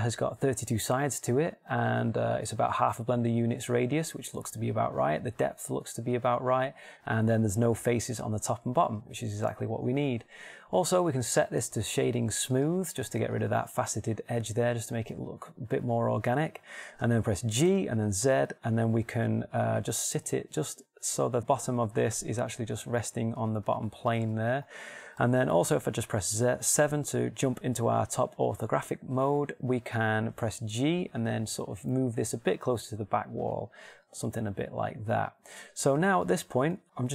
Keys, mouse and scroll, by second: 10.0 middle click, 13.7-14.9 shift+middle drag, 18.1 g, 24.8 click, 25.0 middle click, 26.9 KP_7, 31.1 g.